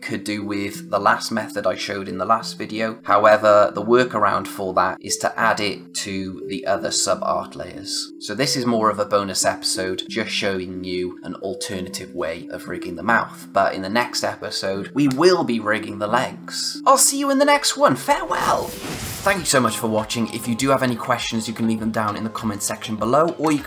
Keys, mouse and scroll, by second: 3.2 click.